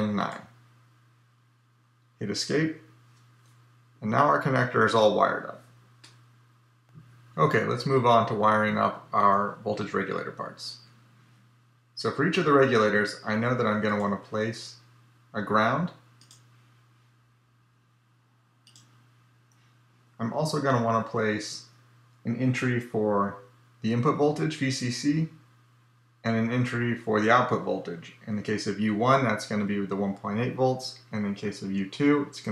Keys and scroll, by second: 2.3 Escape.